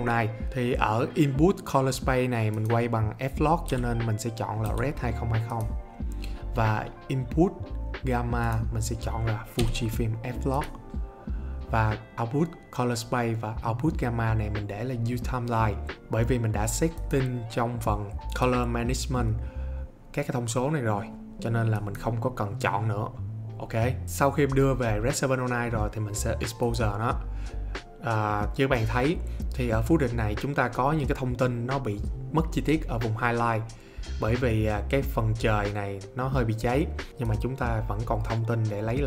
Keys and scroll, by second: 3.6-4.6 typing, 9.6 f, 24.0 Escape.